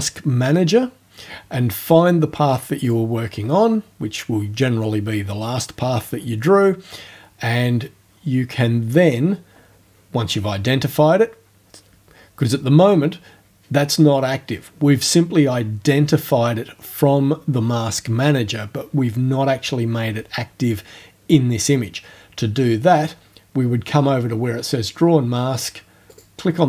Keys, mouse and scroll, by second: 2.9 click, 26.1 click.